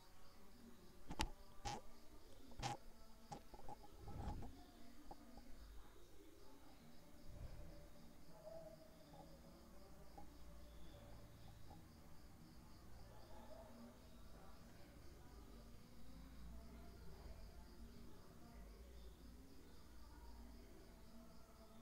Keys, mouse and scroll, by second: 1.9 click, 2.9 click, 3.9 click, 4.5 click, 5.3 click, 6.0 click, 7.4 click, 8.4 click, 10.0 click, 13.9-17.3 middle drag, 19.4 g, 20.4 z.